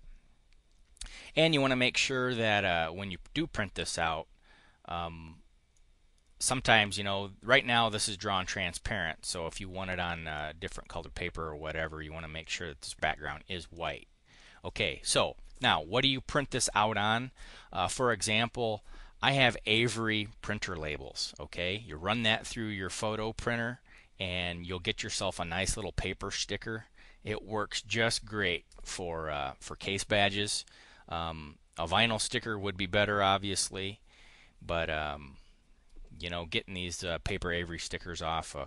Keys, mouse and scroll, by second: 5.6 right click, 10.6 right click, 13.6 click, 14.2 click.